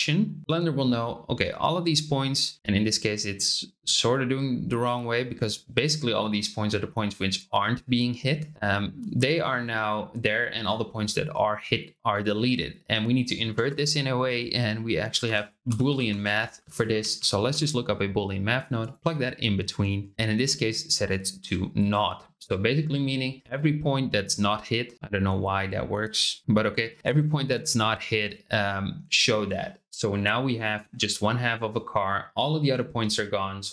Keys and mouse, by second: 13.5 shift+a, 15.6 o, 17.1 Down, 20.0-21.9 drag, 31.1-31.7 middle drag.